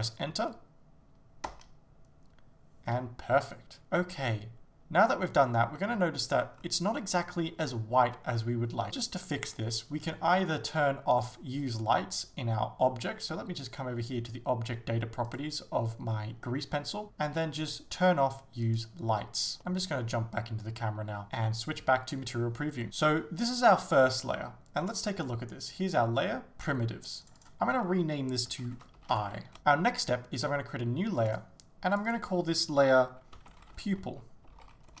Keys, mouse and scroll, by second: 1.6 Return, 3.7 ctrl+z, 5.8 middle click, 6.6 scroll up 1, 6.9 shift+middle click, 8.2-8.9 scroll down 1, 8.9 shift+z, 18.7 click, 19.6 KP_0, 21.2 click, 22.8 shift+middle click, 27.3-35.0 drag, 29.6 Return.